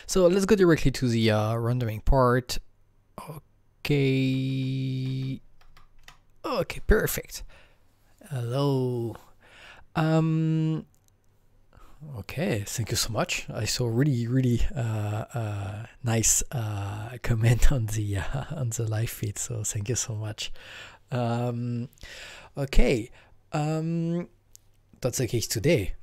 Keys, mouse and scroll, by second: 0.3 Right, 0.4 Right, 0.6 Right, 1.1 Right, 1.1-2.2 Right, 2.4 Right, 2.4 Right, 2.6 Right, 2.6 Right, 2.6 Right, 2.8 Right, 2.9 Right, 2.9 Right, 3.1 Right, 3.1 Right, 3.1 Right, 3.3 Right, 3.3 Right, 3.6 Right, 3.8 Right, 3.8 Right, 3.8 Right, 4.2 Right, 4.4 Right, 4.5 Right, 5.0 Right, 5.7 Right, 6.0 Left.